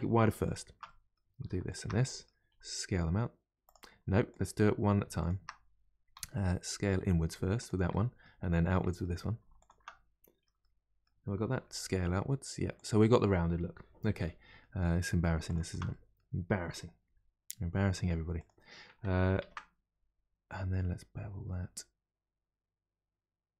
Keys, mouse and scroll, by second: 0.4 alt+click, 0.8 middle click, 1.7 alt+shift+click, 2.0 middle click, 2.5 s, 4.3 click, 5.2 shift+click, 6.1 s, 7.9-9.6 middle drag, 9.6 alt+click, 10.6-11.6 middle drag, 11.6 s, 13.0-15.5 middle drag, 15.5 alt+click, 15.9-17.1 middle drag, 17.1 g, 19.4 ctrl+b.